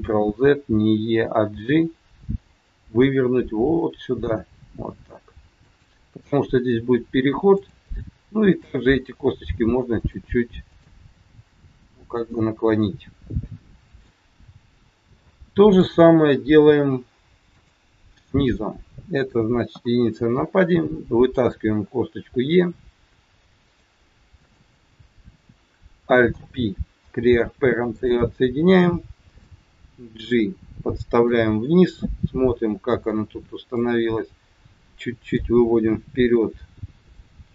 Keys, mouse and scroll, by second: 1.6 g, 7.6 click, 8.4 g, 10.5 click, 11.3 g, 12.7 middle click, 15.2 shift+middle click, 17.4 click, 19.7 KP_1, 21.5 e, 24.5 click, 26.2 alt+p, 29.4 click, 31.7 middle click, 33.7 click, 37.0 click.